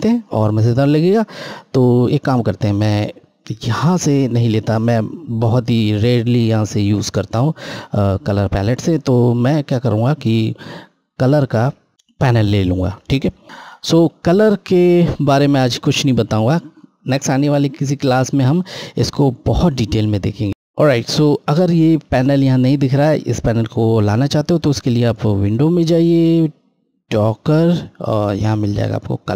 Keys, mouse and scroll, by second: 11.0 click, 25.1 click.